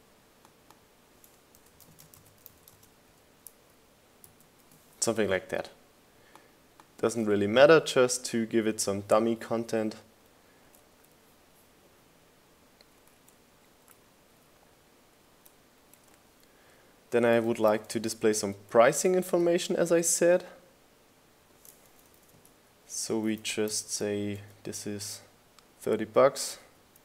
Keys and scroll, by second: 0.4 super+a, 3.3-6.3 typing, 9.7 Up, 10.0 Left, 10.3 Right, 12.7 Down, 13.8 Down, 15.1 Down, 15.3 Right, 15.6 Up, 16.4 Left, 17.4 Down, 19.8 super+v, 20.6 shift+Down, 20.8 shift+Up, 21.5 Down, 25.2 super+a, 26.0-27.0 typing.